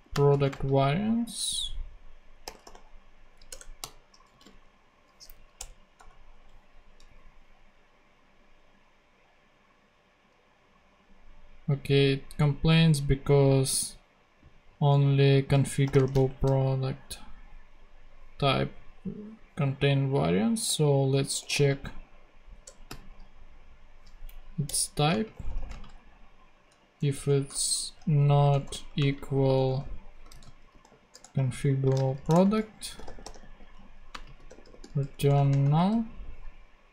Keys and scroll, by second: 0.0-1.2 typing, 2.6-4.8 typing, 3.5 Return, 5.3 Down, 5.5 Return, 5.9 ;, 14.9 Return, 15.6-16.6 typing, 21.1-22.8 typing, 22.6 Return, 24.3 Down, 24.6 Return, 25.1 space, 25.3 =, 25.7 space, 26.9-35.6 typing, 31.4 super+Right, 31.8 super+space, 32.3 shift+Return.